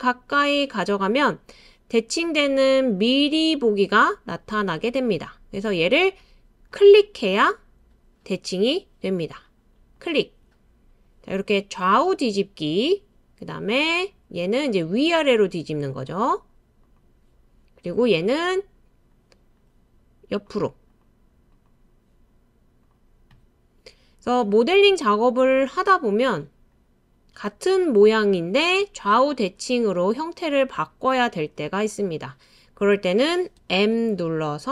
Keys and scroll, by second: 33.6 m.